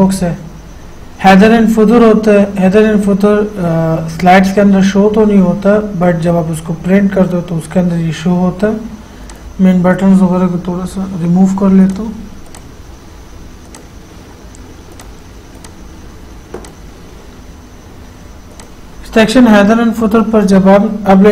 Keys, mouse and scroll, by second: 9.5 click, 12.1 click, 12.1 click, 18.8 click.